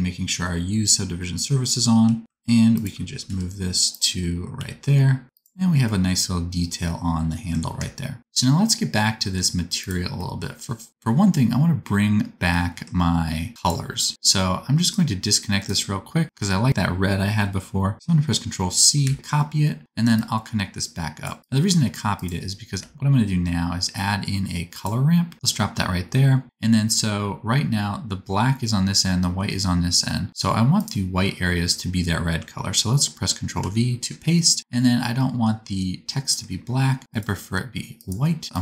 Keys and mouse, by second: 1.8 r, 3.2 g, 4.5 s, 7.3-9.7 middle drag, 9.7 click, 9.9-13.5 middle drag, 13.5 click, 13.6-14.8 middle drag, 14.8-30.7 ctrl+drag, 19.0 ctrl+c, 20.1-22.2 middle drag, 20.1-22.2 right drag, 22.8 shift+a, 30.7-38.2 middle drag, 33.6 ctrl+v, 38.2-38.6 drag.